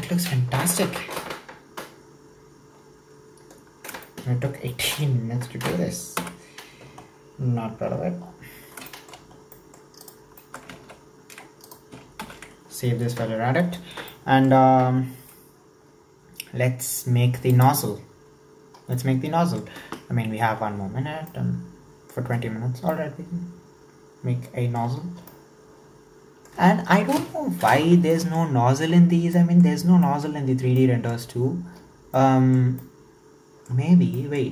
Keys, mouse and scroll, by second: 4.1-6.2 shift+middle drag, 6.2 /, 7.1-7.9 scroll down 8, 7.9-8.9 scroll up 9, 8.9 shift+middle click, 9.4 scroll down 4, 9.5-10.1 middle drag, 10.1 right drag, 10.4 shift+middle click, 10.9 ctrl+a, 11.7 right click, 12.5 ctrl+s, 12.9-14.1 scroll down 1, 14.1-17.2 shift+middle drag.